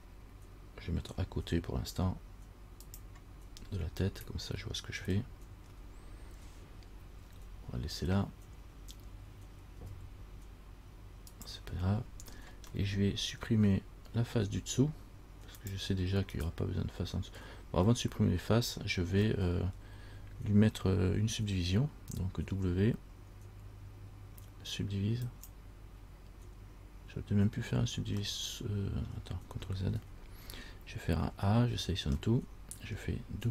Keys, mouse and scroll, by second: 3.6-5.2 scroll up 6, 5.3 shift+scroll up 1, 5.4 shift+middle click, 5.8 shift+scroll down 1, 10.0 g, 13.0 middle click, 13.0 scroll up 1, 13.5 scroll down 1, 15.8 click, 16.5 right click, 18.1 middle click, 18.1 scroll up 1, 18.9 scroll down 1, 19.4 scroll up 1, 19.5 middle click, 19.9 scroll down 1, 22.8 w, 28.4 scroll up 1, 28.5 middle click, 30.0 scroll down 1, 30.1 ctrl+z, 31.4 a, 31.9 a, 32.5 middle click, 32.5 scroll up 1, 33.1 scroll down 1.